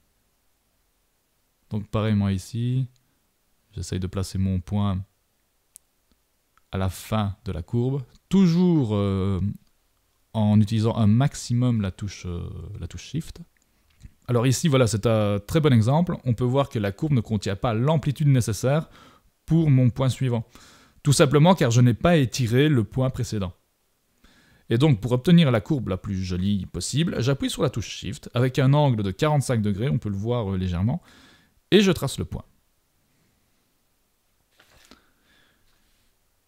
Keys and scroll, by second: 5.5 super+-, 12.2 shift+super+=, 22.9 super+z, 32.1 super+-.